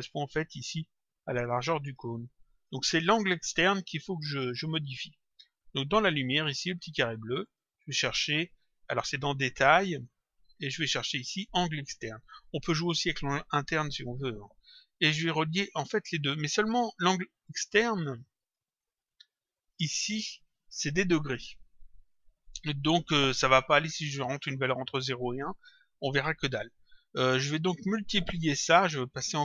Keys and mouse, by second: 4.8 click, 7.4 click, 12.2 click, 18.0 click, 19.6 click, 24.1 click.